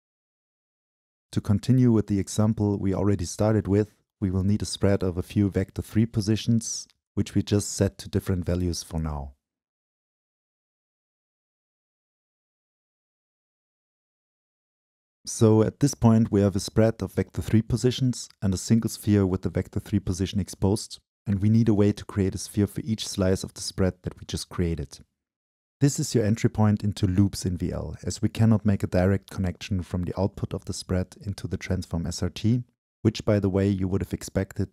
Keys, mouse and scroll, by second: 0.0-2.6 drag, 3.0-4.6 drag, 5.1-7.7 drag, 9.2 middle click, 9.3 middle click, 13.2-15.0 middle drag, 17.9-20.3 drag, 32.6-34.6 drag.